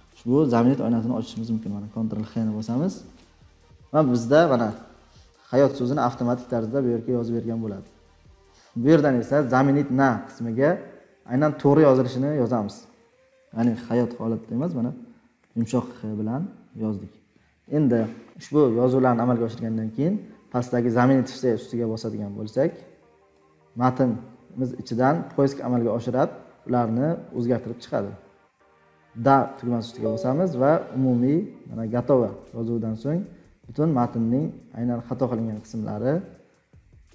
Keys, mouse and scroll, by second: 1.9 ctrl+h, 4.7 click, 6.5 click, 7.2 click.